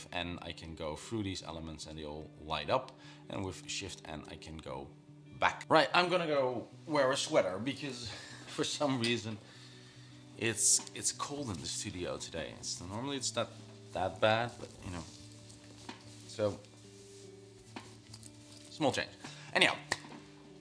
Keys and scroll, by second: 0.0-1.5 typing, 4.1 shift+n, 4.7 shift+n.